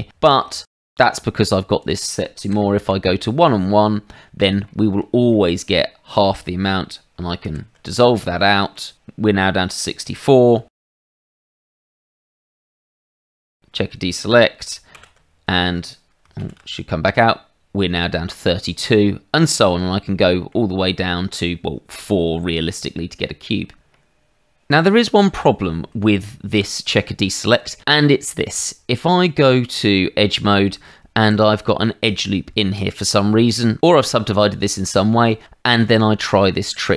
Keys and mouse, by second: 0.2 shift+middle click, 0.8 middle click, 1.8 click, 2.5 KP_1, 2.8 Return, 4.1 middle click, 4.6 shift+middle click, 5.3 middle click, 7.4 ctrl+x, 8.0 middle click, 10.6 shift+z, 10.9 click, 12.3 click, 13.4 click, 14.9 ctrl+x, 16.4 shift+z, 18.7 middle click, 19.4 shift+middle click, 20.2 shift+middle click, 20.9 shift+middle click, 23.9 middle click, 28.5 Tab, 31.2 ctrl+r, 32.0 click, 32.6 Escape.